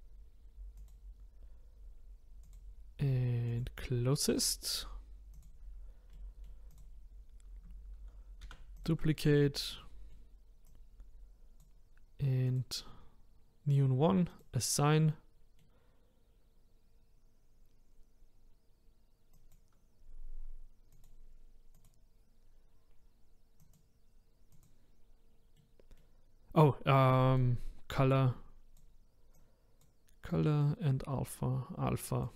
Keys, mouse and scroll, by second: 0.9 click, 5.4 click, 6.1 middle click, 6.8 click, 8.4 shift+d, 9.8-10.9 middle drag, 10.9 click, 12.4 click, 14.4 click, 15.2-19.7 middle drag, 19.7-21.7 drag, 21.8-25.6 drag, 25.6-29.5 middle drag, 29.5 click.